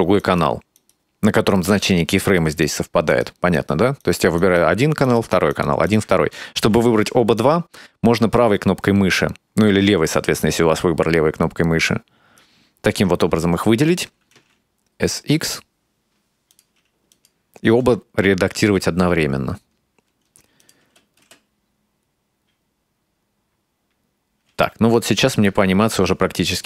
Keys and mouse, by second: 0.2 right click, 0.8 right click, 2.6 right click, 3.1 right click, 3.6 right click, 4.0 right click, 4.4 right click, 5.1 right click, 5.5 right click, 5.9 right click, 7.4-12.5 right drag, 14.2 s, 17.1 click, 17.7 space, 20.6 click, 20.8 space, 21.2 space, 24.5 space, 26.0-26.6 drag.